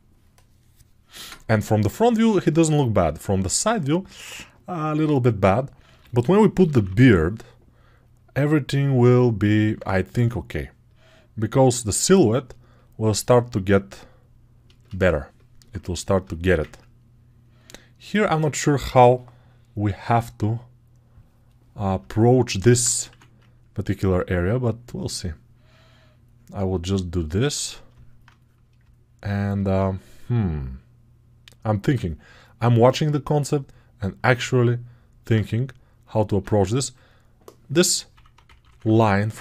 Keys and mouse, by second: 4.7-12.6 right drag, 5.7 g, 6.4 ], 6.6 ], 12.6 click, 16.7 alt+right click, 16.8 alt+click, 17.0-22.1 alt+drag, 22.1-27.8 alt+right drag, 27.8-31.8 alt+drag, 31.8-34.2 right drag, 34.2 alt+click, 34.3 right click, 34.4-39.4 alt+drag.